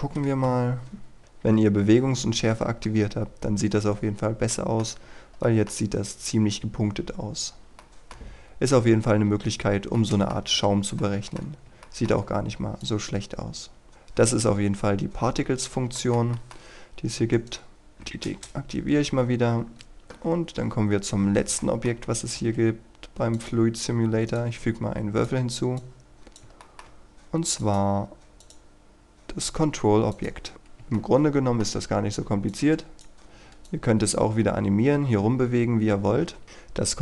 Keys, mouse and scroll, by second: 0.4 F12, 4.1-4.5 scroll up 1, 4.5 middle click, 4.8-5.4 scroll up 1, 5.4 middle click, 6.4-7.0 scroll down 1, 7.8 middle click, 9.2 Escape, 10.0 middle click, 10.4-11.0 scroll up 1, 11.0 middle click, 11.4 scroll down 1, 11.8 shift+middle click, 12.8 click, 14.7 scroll down 1, 14.9-15.3 scroll up 1, 15.3-15.8 scroll down 1, 15.9 shift+middle click, 17.3 right click, 17.7 click, 17.9 Delete, 18.2 Return, 21.5 middle click, 23.3-26.4 drag, 26.6 shift+middle click, 27.5 click, 30.5 middle click, 30.9 shift+middle click, 32.5-34.7 drag, 36.4-37.0 scroll up 1.